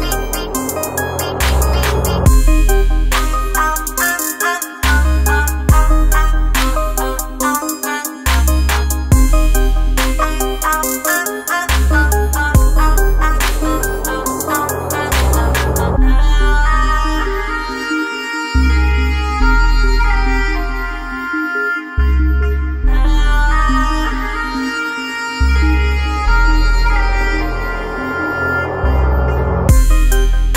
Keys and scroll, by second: 24.2 space.